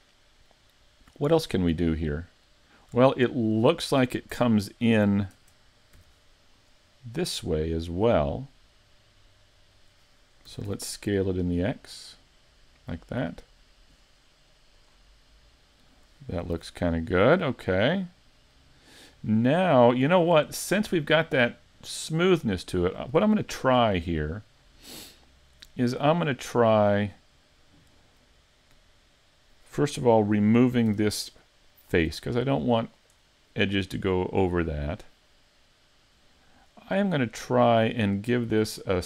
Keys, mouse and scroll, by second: 1.1 middle click, 3.2 shift+middle click, 4.3 Tab, 5.4 ctrl+Tab, 6.6 right click, 7.0 middle click, 8.2 middle click, 10.5 s, 14.9 click, 15.3 middle click, 16.6 z, 17.0-17.3 scroll down 2, 17.3 middle click, 19.6 scroll up 3, 20.0 shift+middle click, 22.4 middle click, 23.4 shift+middle click, 24.0 middle click, 26.8 right click, 30.9 x, 33.2 middle click.